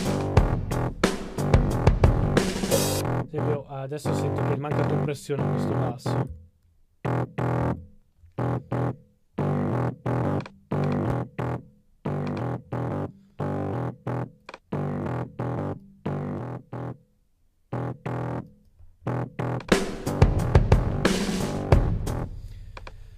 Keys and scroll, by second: 6.3 typing, 7.3-8.4 typing.